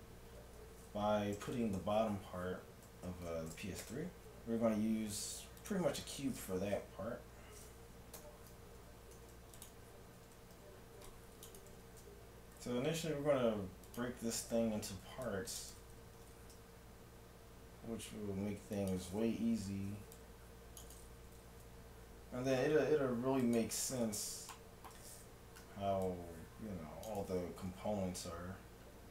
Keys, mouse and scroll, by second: 0.3 z, 1.6 Tab, 3.3 a, 3.9 shift+a, 8.2 Tab, 9.2 ctrl+Tab, 10.1 a, 10.5 c, 11.7 g, 14.8 a, 15.2 c, 15.6-17.5 drag, 16.2 g, 19.6 a, 19.9 c, 21.4 g, 24.6-26.2 middle drag, 25.5 a, 25.7 c, 27.6 g.